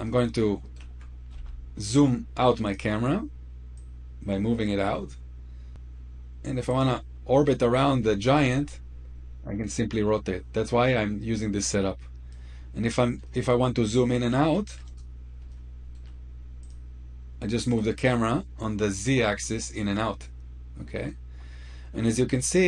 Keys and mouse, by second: 1.1 f, 2.5 click, 8.3 click, 13.0-13.9 middle drag, 15.3-15.7 shift+middle drag, 16.4 click.